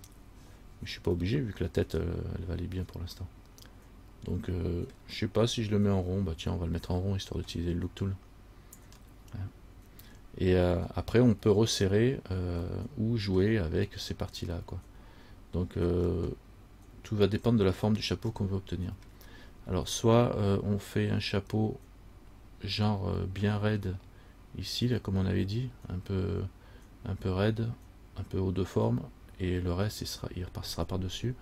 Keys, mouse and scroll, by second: 1.4 middle click, 9.3 middle click, 9.3 scroll up 1, 10.2-12.4 scroll down 1, 12.9 middle click, 16.3 middle click, 18.5 scroll up 1, 18.6 middle click, 19.2-20.0 scroll down 1.